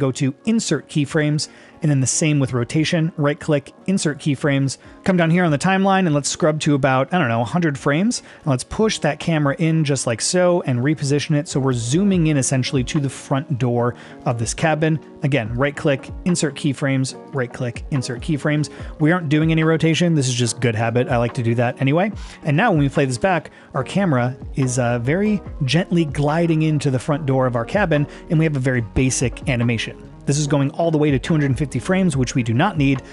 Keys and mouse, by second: 2.9-4.2 right drag, 5.5-7.9 drag, 10.4 shift+middle click, 11.0 shift+middle click, 15.7 right click, 17.5 right click, 22.5 click, 23.2 space, 28.5-29.9 drag, 32.3 click.